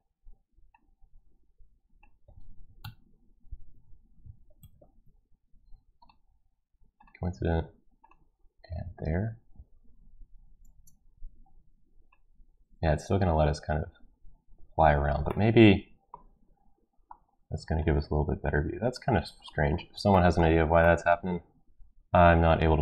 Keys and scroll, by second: 2.8 ctrl+x, 4.6 ctrl+z, 10.7 Return.